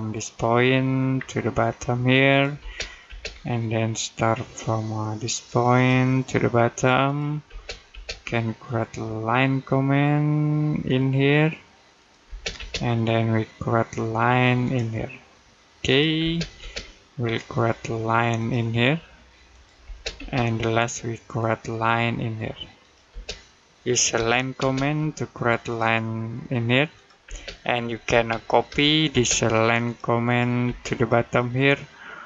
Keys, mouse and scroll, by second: 0.5 middle click, 1.0-1.3 scroll down 1, 2.1 click, 2.4 space, 3.2 middle click, 5.6 click, 7.3 space, 10.7 click, 12.1 space, 14.5 click, 16.0 space, 18.2 click, 19.7 space, 21.1 click, 22.9 space, 24.0-24.4 typing, 25.5 click, 27.1-28.9 typing, 29.7 click, 30.8 click.